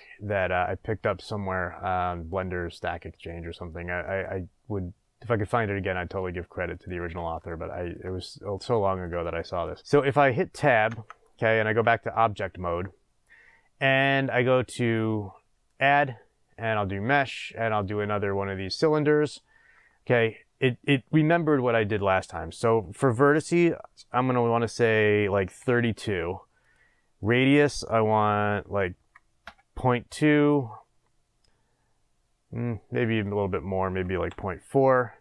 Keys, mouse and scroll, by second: 4.0 click, 6.7 click, 7.4-9.8 shift+middle drag, 8.2-8.7 scroll down 2, 9.8 click, 10.8 Tab, 15.6-19.5 drag, 23.0 click, 26.7 click, 28.9-30.5 drag, 33.2-35.2 drag.